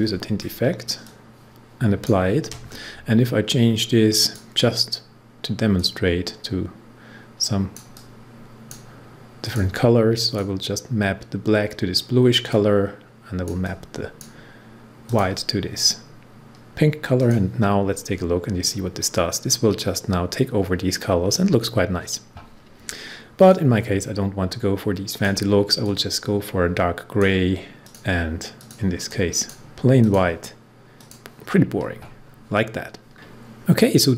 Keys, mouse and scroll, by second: 0.0-0.1 typing, 1.0-15.0 drag, 18.6 scroll up 1, 23.3-29.9 drag, 33.1 scroll up 1, 33.7 scroll down 1.